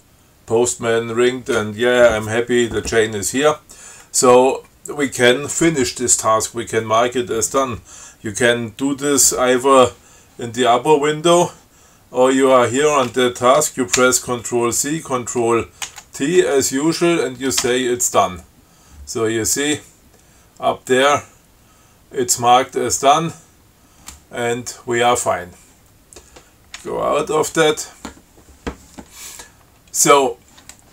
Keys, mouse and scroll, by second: 14.2 ctrl+c, 16.1 ctrl+t, 17.9 d, 27.1 q.